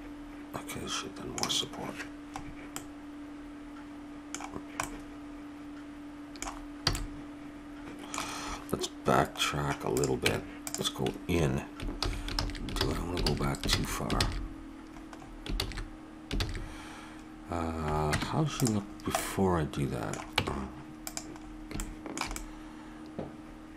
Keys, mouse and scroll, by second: 2.8-4.0 middle drag, 4.6 middle click, 5.6 middle click, 6.9 a, 6.9-8.6 middle drag, 9.9-11.4 drag, 10.2 Tab, 12.0 ctrl+z, 12.3 ctrl+z, 12.8 ctrl+z, 13.2 ctrl+z, 13.7 ctrl+z, 14.2 ctrl+z, 15.5 ctrl+z, 16.4 ctrl+z, 18.1 Tab, 20.3 Tab, 21.2 middle click, 22.5 middle click.